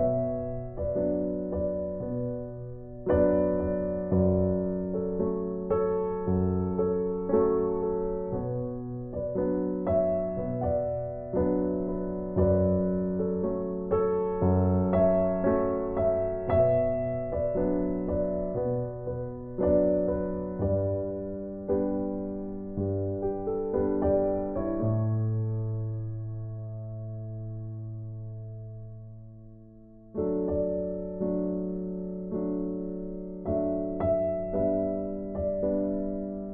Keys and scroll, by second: 14.4 ctrl+j, 36.2 ctrl+t.